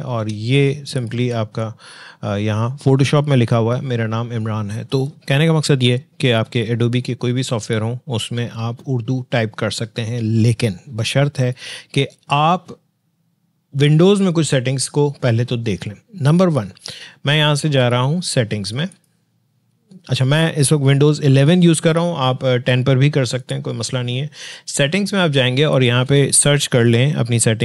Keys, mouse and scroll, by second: 0.9 alt+click, 18.9 click, 23.4 click.